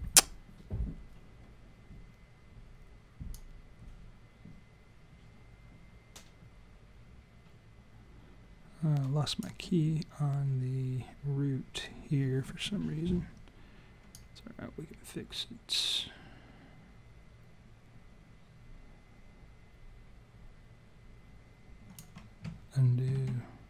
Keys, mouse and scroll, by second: 3.4 click, 14.2 click, 23.2 ctrl+z.